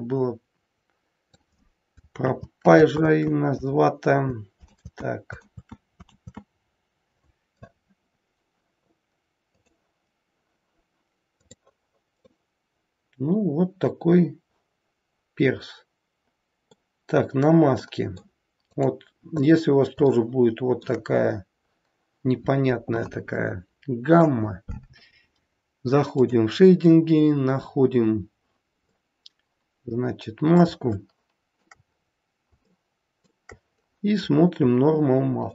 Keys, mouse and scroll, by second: 3.4 ctrl+z, 5.8 ctrl+z, 6.4 ctrl+z, 9.5 click, 11.3 click, 12.2 middle click, 17.8 middle click, 18.8 click, 19.5-20.0 scroll up 2, 20.2 shift+middle click, 21.2-22.0 scroll up 3, 23.3 middle click.